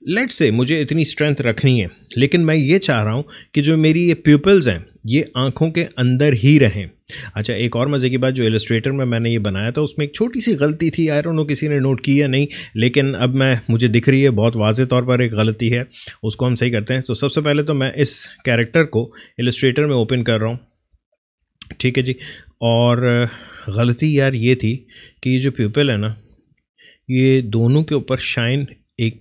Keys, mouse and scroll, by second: 1.7 Left, 3.9 Right, 18.8 click, 22.6 alt+scroll down 1, 23.3-24.2 alt+scroll up 1, 24.2 alt+space, 24.4 alt+click, 24.7 alt+space, 25.4 alt+click.